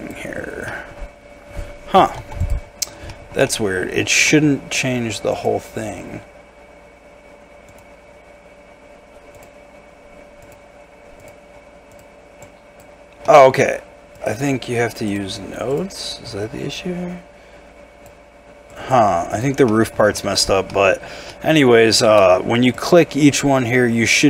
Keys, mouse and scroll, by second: 0.4 scroll up 1, 0.7 middle click, 1.2-2.1 scroll down 1, 2.1-2.7 scroll, 2.2 Tab, 2.7 scroll up 1, 3.1 shift+middle click, 3.5 shift+middle click, 12.4 double click, 13.2 middle click, 19.6 scroll up 1, 19.7 middle click, 20.2 shift+middle click, 20.4 shift+scroll up 2, 20.7 middle click, 21.0 scroll down 1, 21.3 middle click, 21.9 shift+middle click, 23.0-24.2 scroll down 1.